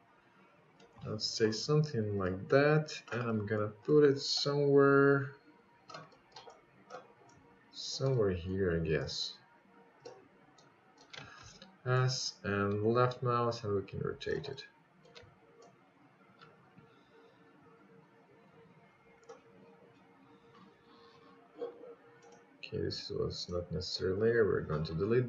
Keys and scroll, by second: 5.8 s.